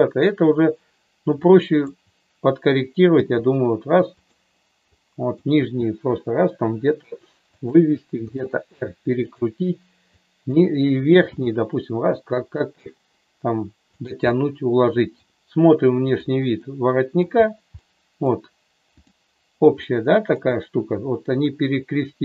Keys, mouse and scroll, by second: 1.5 click, 3.1 g, 4.9 click, 5.9 g, 7.5 click, 8.3 r, 9.3 click, 10.0 click, 11.3 g, 14.3 middle click, 16.2 click, 16.6 middle click, 17.9 middle click, 18.9 click, 19.8 middle click, 20.4 middle click.